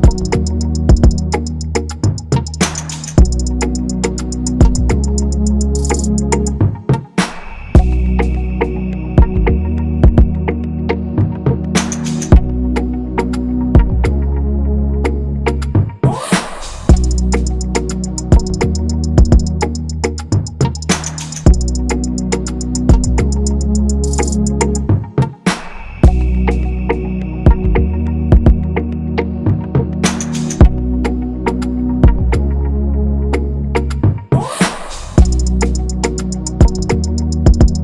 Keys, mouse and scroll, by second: 0.8 Return, 1.6 double click, 2.5 ctrl+-, 2.6 ctrl+-, 10.4-11.8 scroll, 12.2 ctrl+c, 13.4 shift+click, 13.7 right click, 15.5 double click, 17.7 double click, 20.8 double click, 24.0 double click, 28.3 Return.